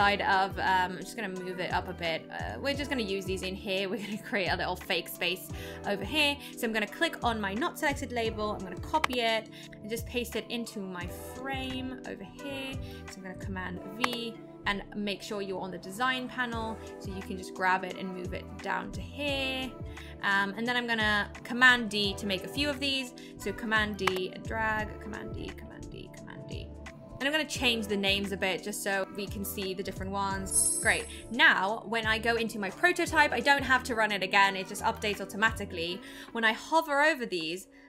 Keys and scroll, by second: 9.0 super+c, 14.0 super+v, 24.0 super+d.